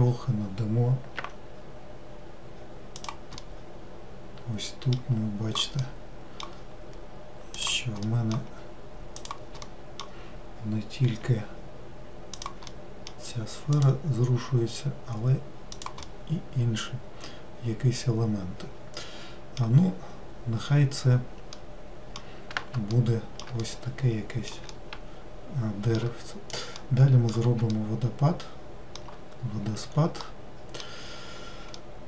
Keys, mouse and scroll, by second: 3.4-7.6 middle drag, 7.6 click, 8.1-9.2 middle drag, 9.2 click, 9.7-11.2 middle drag, 11.2 g, 12.7-13.8 middle drag, 13.8 click, 16.1-19.1 middle drag, 20.0-21.4 scroll down 4, 21.6-32.0 middle drag.